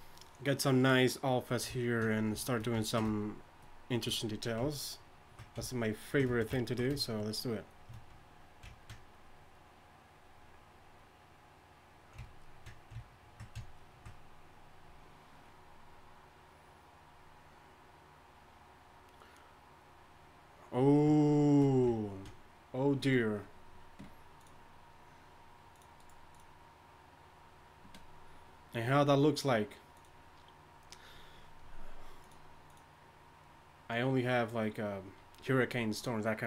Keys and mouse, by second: 4.4-6.1 drag, 7.3-12.3 drag.